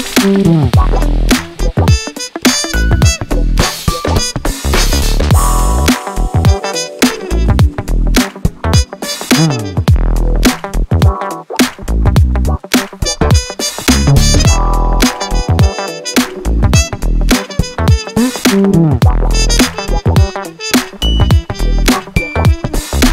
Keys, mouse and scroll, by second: 0.5 click, 1.0-1.4 scroll down 2, 1.7-3.1 drag, 3.4 click, 3.7-4.2 scroll up 2, 4.7 click, 5.4 right click, 6.3 click, 6.6 scroll down 2, 6.8 scroll up 2, 7.1 click, 7.9-8.3 scroll up 1, 9.4 drag, 10.0-11.2 drag, 11.6 click, 11.9 scroll down 2, 12.1-12.5 scroll up 2, 12.8-14.3 drag, 15.3 click, 15.7 click, 16.0-17.4 right drag, 17.5 click, 18.4 click, 18.8 scroll down 2, 19.0 scroll up 2, 20.1 click, 20.4-20.8 scroll down 2, 21.1 click, 22.5 click, 22.9 scroll up 1.